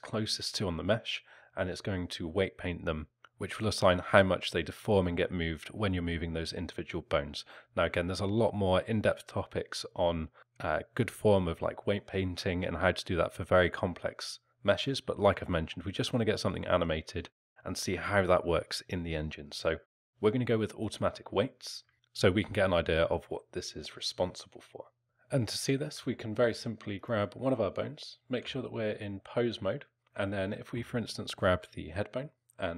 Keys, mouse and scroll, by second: 21.9 Tab.